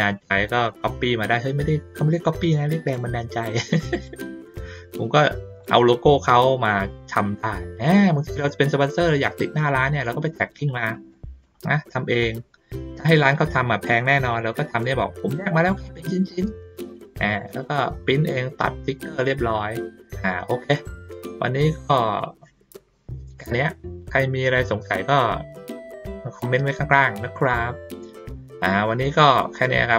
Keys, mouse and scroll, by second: 0.6 click, 2.0-2.9 drag, 3.9 click, 4.5-5.6 drag, 7.4 ctrl+middle click, 8.2 ctrl+middle click, 10.2 ctrl+middle click, 11.1 middle click, 11.7 ctrl+shift+middle click, 12.1 ctrl+shift+middle click, 12.4 ctrl+middle click, 13.6 ctrl+middle click, 13.9 ctrl+middle click, 14.0 ctrl+middle click, 14.4 ctrl+middle click, 15.2 ctrl+middle click, 15.4 ctrl+middle click, 16.0 middle click, 16.6 ctrl+middle click, 17.3 middle click, 18.9 middle click, 19.8 middle click, 20.5 ctrl+middle click.